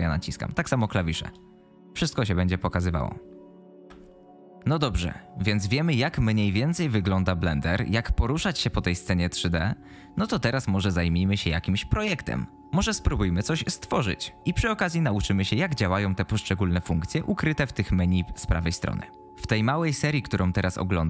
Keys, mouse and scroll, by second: 1.8 a, 2.5 q, 2.9 a, 3.2 a, 3.8 alt+a.